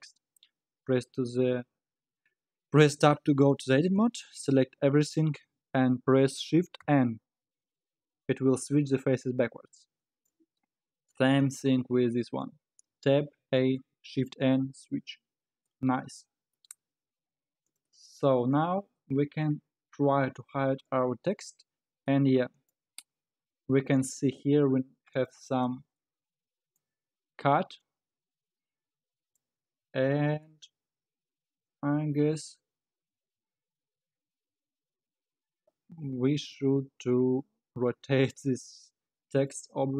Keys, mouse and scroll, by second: 3.2 Tab, 4.5 a, 7.1 shift+n, 9.7 Tab, 10.0-10.5 middle drag, 10.5-10.9 scroll up 3, 10.9-11.4 scroll down 5, 11.4 click, 12.0-12.4 scroll up 1, 12.4-12.9 scroll down 4, 12.9 Tab, 13.4 a, 14.1 shift+n, 14.6 Tab, 15.0-15.7 scroll up 8, 15.7 middle click, 16.5-16.8 scroll down 5, 17.2-17.6 scroll up 4, 17.6 click, 20.8 click, 21.6 scroll down 4, 22.1-23.9 middle drag, 23.9-25.7 drag, 25.7-26.0 scroll up 2, 26.0-27.1 middle drag, 27.1-27.9 scroll down 4, 27.9-29.6 middle drag, 29.6-29.9 scroll up 3, 29.9 scroll down 2, 30.5-33.4 middle drag, 39.3 click.